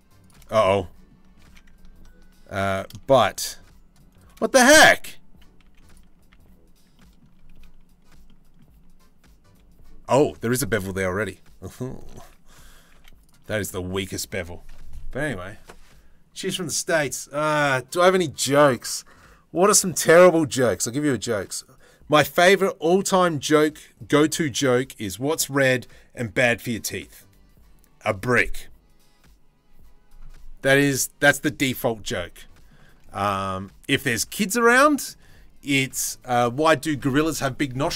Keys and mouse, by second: 1.0 ctrl+z, 2.3 ctrl+b, 5.2 z, 5.9 a, 11.8 ctrl+z, 12.5 z, 13.1 click, 13.9 Tab, 32.0-32.9 middle drag, 33.0 shift+middle drag, 33.4 z, 34.3-34.6 drag.